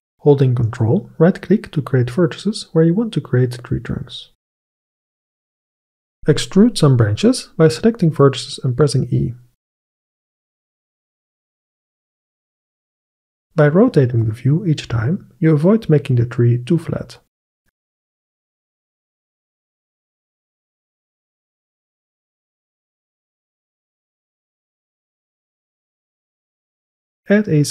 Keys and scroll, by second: 3.7 g, 4.6 shift+a, 9.7 g, 14.0 g, 19.1 g.